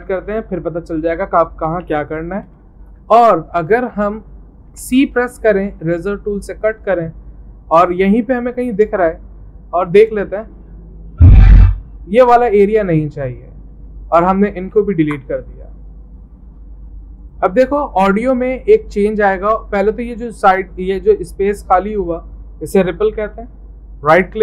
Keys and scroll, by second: 1.8 m, 4.7 c, 15.0 Delete.